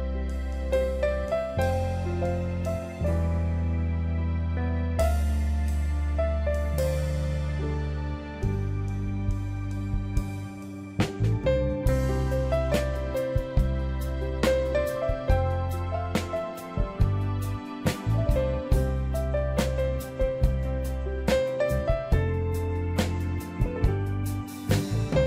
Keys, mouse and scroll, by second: 10.6 ctrl+i, 13.0 ctrl+t, 14.3 alt+click, 23.6 click, 23.8 Up, 24.1 Up, 24.9 Down.